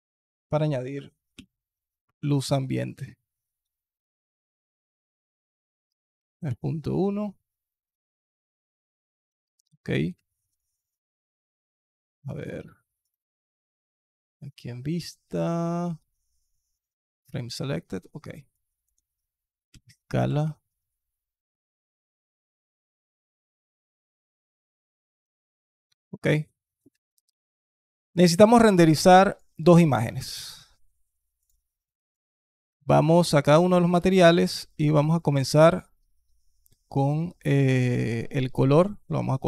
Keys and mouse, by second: 4.8-6.3 drag, 9.2 alt+click, 10.0 alt+drag, 17.5 alt+click, 18.3 alt+click, 19.5 s, 24.3 alt+click, 25.2 alt+click, 26.7 alt+drag, 27.2 alt+click, 28.6-29.2 alt+drag, 31.8 alt+click, 32.5 alt+click, 33.3 click, 33.7 click, 38.4 click.